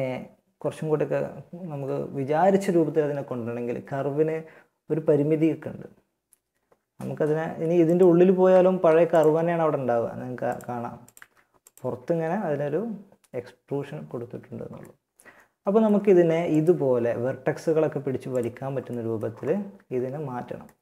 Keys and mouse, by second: 7.6 Tab, 8.4 g, 10.4 g, 11.2 Tab, 12.0-14.0 middle drag, 14.3 middle click, 15.8-17.5 right drag, 16.0 Tab, 17.2 Tab, 17.7 Tab, 18.1 right click, 19.0 Tab, 19.9 middle click.